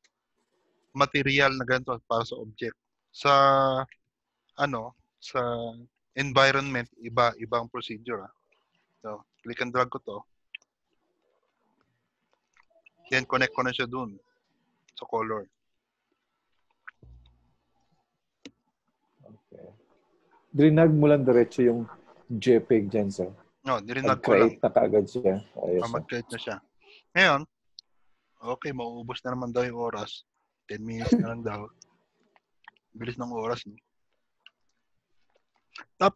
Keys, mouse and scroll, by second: 3.8 middle click, 3.8 scroll down 3, 6.5-6.8 scroll up 1, 11.3 click, 13.5 click, 26.9 click, 32.2 click, 33.2 click, 33.8 middle click, 35.0 g, 35.8 shift+middle click.